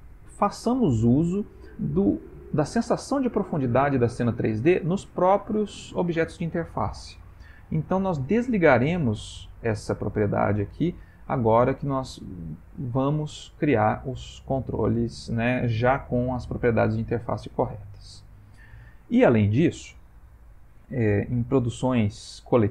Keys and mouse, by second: 5.4 click, 12.7 middle click, 17.5 middle click.